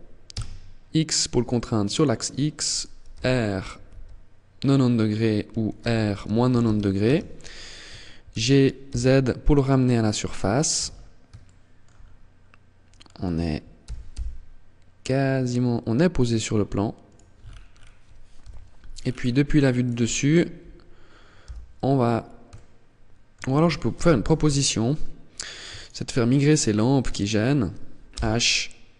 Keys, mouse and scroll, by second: 2.3 click, 2.3 r, 4.9 r, 7.5 g, 10.0 click, 10.0-10.5 scroll up 5, 10.5 shift+middle click, 11.1-11.5 scroll up 2, 11.9-12.3 scroll up 2, 12.9 g, 16.3 click, 16.5-17.5 scroll down 8, 17.5 scroll down 1, 17.5 KP_7, 18.1-18.5 scroll down 3, 18.9 right click, 20.5 h, 21.7 shift+middle click, 23.1 ctrl+z, 23.5 scroll down 4, 24.5 right click, 24.9 shift+right click, 26.3 shift+right click, 27.3 h.